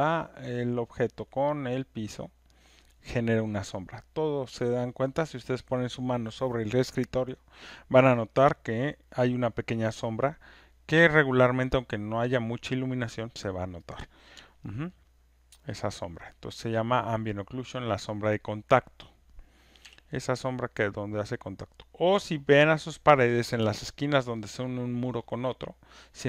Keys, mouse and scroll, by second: 4.3 alt+click, 15.0 alt+right click, 15.2 alt+middle click, 16.5 alt+click, 17.6 alt+middle click, 18.4 click, 19.8 w, 22.9 click, 24.2 alt+middle click.